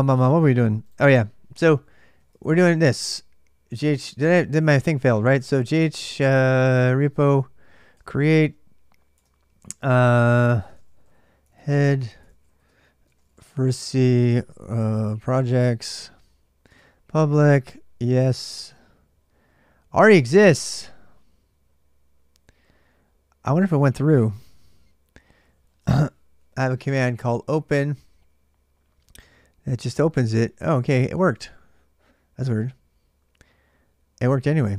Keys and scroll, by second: 0.0-34.7 typing, 9.0 Return.